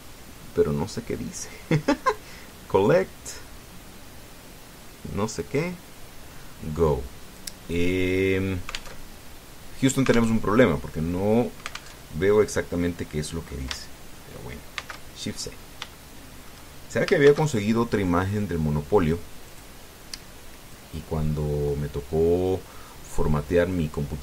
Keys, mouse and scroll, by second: 7.3-7.6 scroll down 2, 8.1 click, 9.7 alt+Tab, 11.1 alt+Tab, 12.7 alt+Tab, 13.5 middle click, 15.5 shift+c, 16.1-16.6 shift+scroll up 3, 16.7 shift+middle click, 18.0 shift+a, 20.2 click, 21.5-24.2 drag.